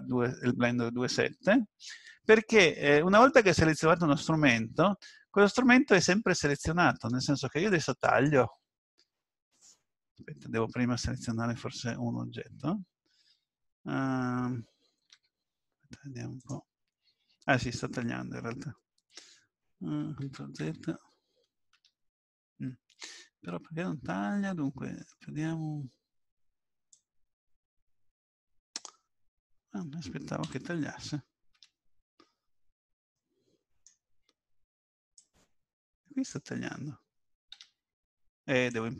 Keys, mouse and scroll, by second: 3.6 click, 7.7 click, 26.9 click, 32.7-33.1 scroll down 1, 33.1 middle click, 35.2 click, 38.7 click.